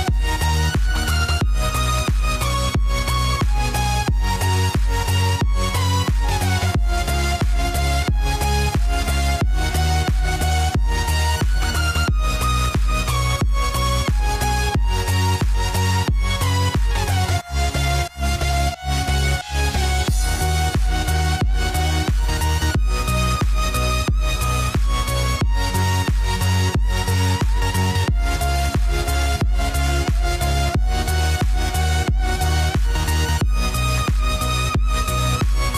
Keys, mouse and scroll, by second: 13.9-25.7 drag, 25.7 x, 26.3 click, 27.7 x, 28.4-30.2 drag, 30.2 x, 31.3 click, 32.4 x, 33.0-35.7 drag.